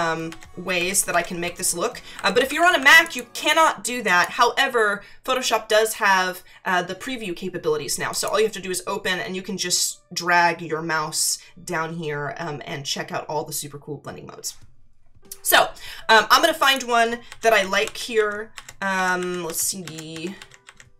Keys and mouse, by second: 0.3 Down, 2.1 Up, 3.0 click, 4.0 click, 8.1 click, 16.6 click, 17.3 Down.